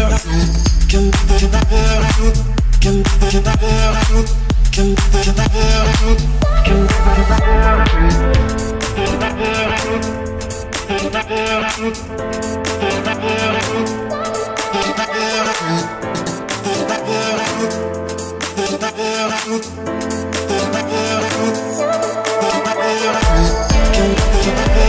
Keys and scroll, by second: 4.7 Delete, 14.8 2, 15.7 Return, 17.2 Escape, 20.4 Escape, 22.3 Escape, 23.0 o.